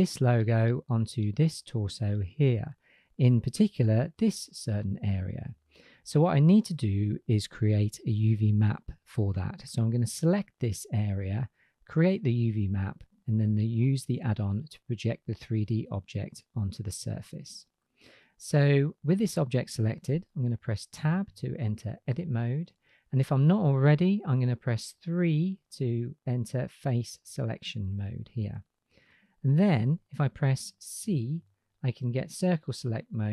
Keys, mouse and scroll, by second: 13.1 middle drag, 18.2 click, 21.2 Tab, 25.3 3, 31.0 c.